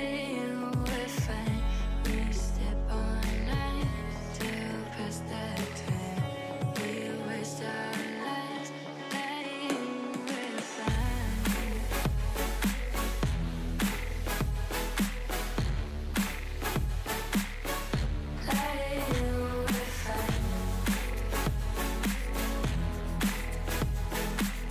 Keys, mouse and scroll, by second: 1.6 click, 3.2 l, 3.9 3, 4.4 l, 4.8 g, 7.5 click, 7.8 3, 7.9 click, 8.3 g, 11.8 click, 12.0 scroll down 2, 12.1 middle drag, 12.3 Tab, 12.4 click, 12.6 middle click, 12.9 scroll down 1, 13.0-14.4 middle drag, 14.7 middle click, 15.0 Tab, 15.3 Tab, 15.4 click, 15.6 shift+a, 17.3 KP_1, 17.5 Tab, 17.7 shift+middle click, 17.9-18.3 scroll up 3, 18.3 alt+z, 18.5 shift+middle click, 18.8-19.2 scroll up 2, 19.2 s, 21.1 s, 22.0 h, 22.3 ctrl+z, 22.5 g, 24.6-24.7 scroll down 4.